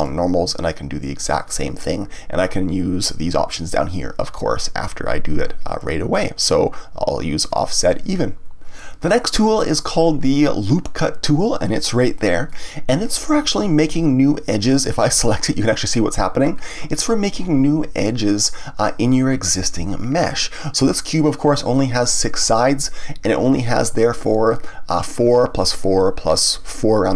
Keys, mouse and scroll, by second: 1.5 click, 7.5 click, 12.4-15.5 drag, 16.4-19.6 scroll up 1.